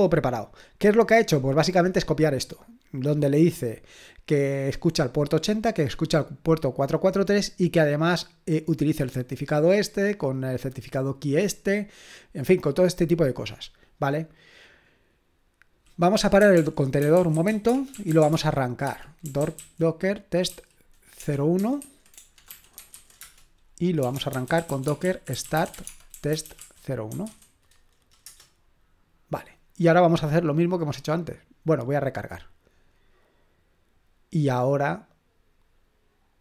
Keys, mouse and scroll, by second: 1.9-3.3 scroll down 1, 3.3-4.3 scroll up 2, 4.3-5.2 scroll up 1, 5.2-7.2 drag, 7.2-8.9 scroll down 2, 8.9-12.5 drag, 12.5-14.0 scroll down 2, 14.0 scroll down 1, 14.3-16.4 drag, 16.1-28.3 typing, 31.1 click, 32.3 click.